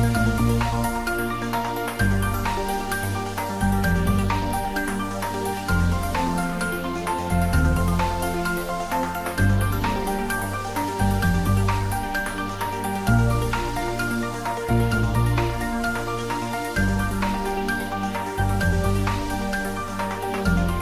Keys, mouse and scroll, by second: 3.9-16.0 drag.